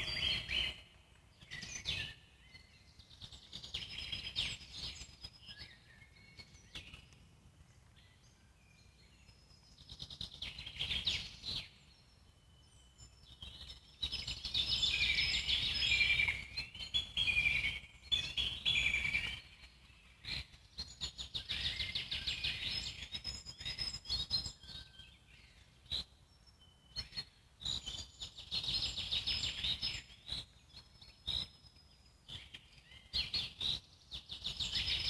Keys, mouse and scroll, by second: 1.3 alt+middle click, 2.1 z, 2.4-5.0 alt+middle drag, 5.0 Tab, 5.4-8.0 drag, 8.0-9.4 right drag, 9.4-11.4 alt+middle drag, 12.3 click, 18.8-20.0 drag, 20.0 g, 28.0 Tab, 29.3 f, 33.8 Tab, 34.2-35.0 alt+middle drag.